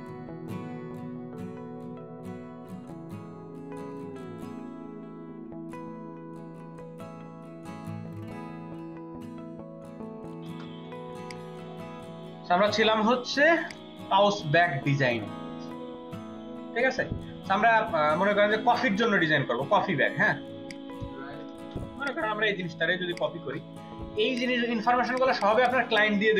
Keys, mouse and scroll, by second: 3.8 double click, 4.8 right click, 7.2 double click, 8.1 space, 8.7 double click, 9.2 ctrl+alt+double click, 9.7 space, 10.0 Delete, 10.2 ctrl+alt+click, 10.3 ctrl+alt+click, 10.4 space, 18.2-20.8 scroll up 17, 20.8-21.4 scroll up 4, 22.0 right click, 25.0 ctrl+alt+click, 25.2 ctrl+alt+double click, 25.8 space, 26.2 ctrl+v.